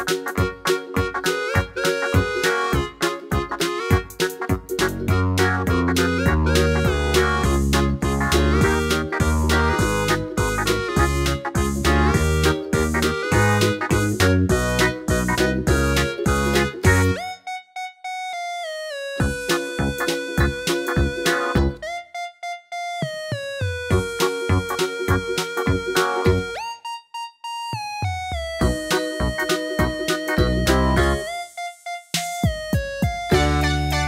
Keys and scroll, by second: 0.6 d, 0.8 d, 7.1 typing, 13.0 super+d, 15.3 super+d, 15.4 super+d, 15.6 super+d, 25.3 d.